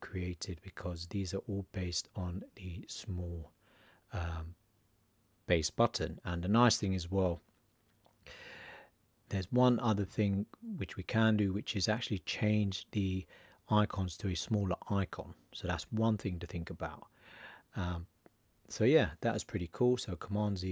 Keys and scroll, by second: 20.2 super+z.